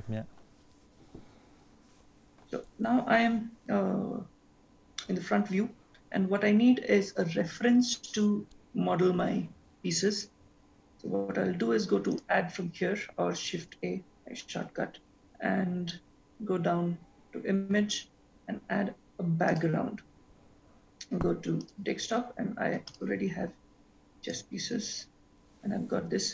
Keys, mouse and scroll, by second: 12.1 click, 13.7 shift+a.